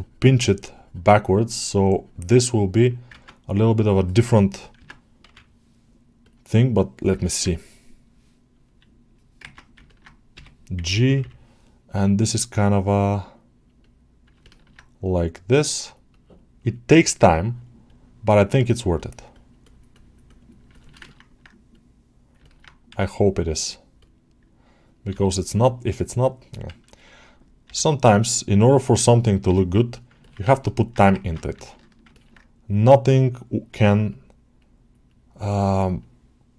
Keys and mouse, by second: 3.1 ctrl+Tab, 4.6 Tab, 7.1 ctrl+alt+middle click, 9.4 ctrl+Tab, 9.7 ctrl+middle click, 11.7 middle click, 12.6 click, 13.1 click, 14.3 ctrl+alt+middle click, 16.0-17.5 drag, 17.7-20.6 drag, 20.9 ctrl+alt+middle click, 22.3 ctrl+alt+middle click, 30.1 ctrl+alt+middle click, 30.4 alt+shift+middle click, 30.7 alt+middle click, 30.9 ctrl+Tab, 31.4 ctrl+middle click, 32.0 ctrl+alt+middle click, 32.6 click, 34.0 click, 34.6 click, 34.9-36.5 drag.